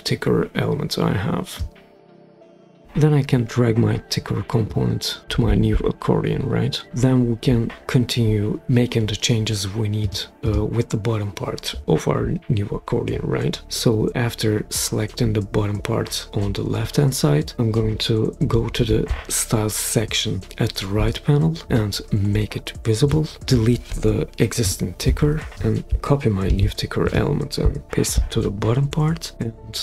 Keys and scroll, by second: 24.6 BackSpace, 26.4 super+c, 27.8 super+v.